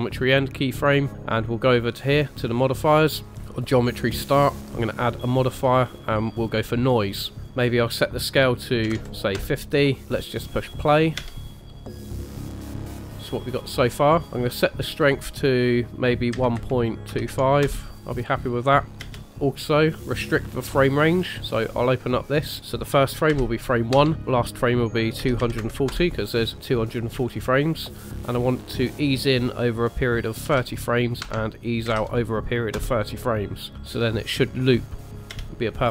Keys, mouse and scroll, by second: 0.7 click, 2.3 click, 3.8 click, 4.7 click, 7.4 click, 11.2 space, 14.3 scroll down 1, 14.8 click, 19.0 space, 19.3 click, 20.0-20.5 scroll down 2, 20.5 click, 21.4 click, 21.5-22.5 scroll down 1, 22.5 click, 22.5-23.8 scroll down 1, 28.5 click, 35.3 space.